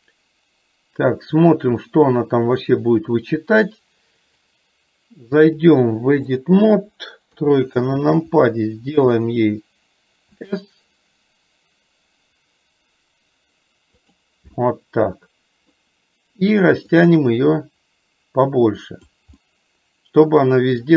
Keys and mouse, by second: 5.5-6.7 drag, 7.4 KP_3, 10.4 s, 14.7-15.8 middle drag, 17.0-19.3 drag, 19.4-20.9 middle drag.